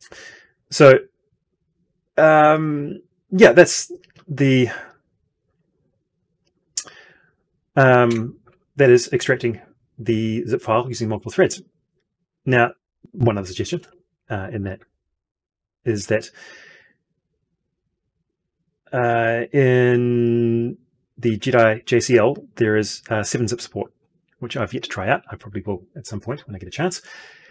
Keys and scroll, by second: 8.0 F12, 13.7 alt+Tab.